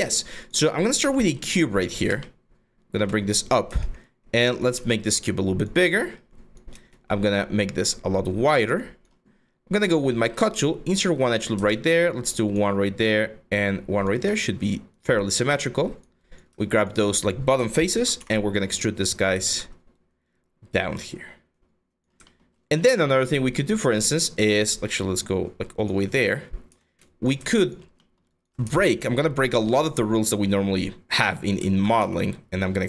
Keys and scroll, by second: 0.6 w, 3.3 r, 5.7 w, 6.3 r, 10.0 ctrl+r, 17.5 ctrl+e, 17.8 w, 19.0 ctrl+z, 26.6 q, 27.0 w.